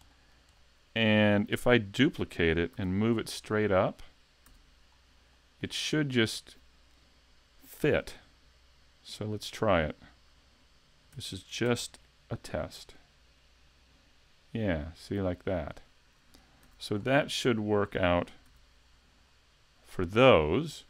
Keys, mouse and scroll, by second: 0.1 shift+middle click, 0.6 middle click, 1.5 KP_3, 2.0 KP_5, 2.7 z, 3.1 scroll up 2, 3.6 middle click, 4.5 a, 4.9 scroll down 2, 5.4 shift+middle click, 11.2 shift+d, 15.7 click, 16.7 a, 16.9-17.4 scroll down 4, 17.4 middle click, 18.5 z, 18.9 scroll up 3, 19.3 middle click.